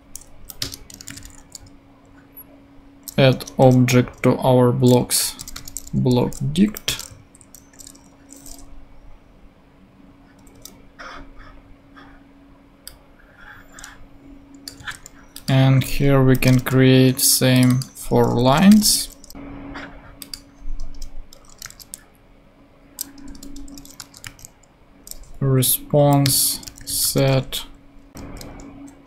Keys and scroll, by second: 0.3 Down, 0.6 Return, 1.0 space, 1.1 a, 2.3 d, 3.3 Return, 5.0-6.0 typing, 6.5 Down, 6.8 Return, 7.2 super+Right, 7.7 super+;, 8.3 ;, 10.4 Up, 14.8 super+c, 16.2 Down, 16.4 Return, 16.5 super+v, 18.2-19.2 typing, 20.9 Return, 21.6 r, 23.2-24.7 typing, 25.9 Down, 26.2 Return, 26.6 space, 26.8 e, 28.2 shift+v.